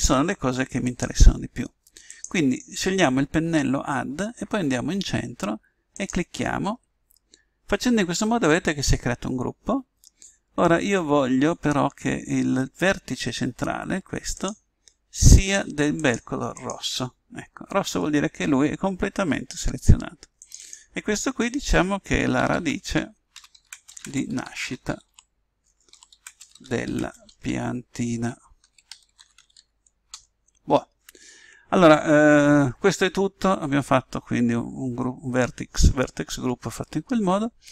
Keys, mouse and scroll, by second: 0.8 click, 5.9 click, 14.3 click, 20.4 click, 25.7 BackSpace, 26.8 l.